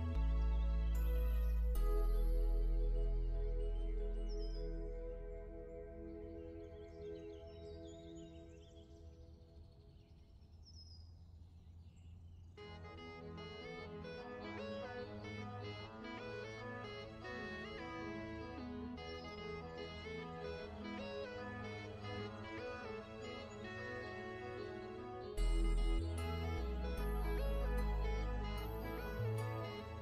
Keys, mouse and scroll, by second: 1.1-2.3 scroll up 1, 2.3 click, 5.6 click, 6.2 z, 6.5 click, 7.5-8.1 alt+shift+scroll up 2, 8.2-8.5 ctrl+scroll up 2, 9.9-10.5 alt+shift+scroll down 2, 10.9 scroll down 1, 11.1-11.4 scroll up 1, 11.5-11.9 ctrl+scroll down 2, 11.9 l, 12.3 alt+shift+click, 13.1 v, 13.6 alt+shift+click, 15.1 i, 15.1 click, 15.5 v, 15.7 click, 15.9-16.2 alt+shift+scroll up 2, 16.2 click, 22.2-23.7 typing, 22.5 Tab, 25.8 click, 27.8-29.8 scroll up 1.